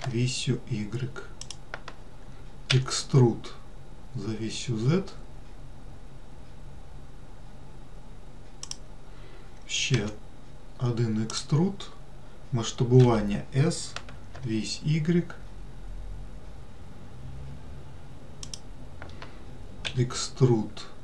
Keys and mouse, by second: 3.0 e, 10.3 e, 13.3 s, 20.2 e.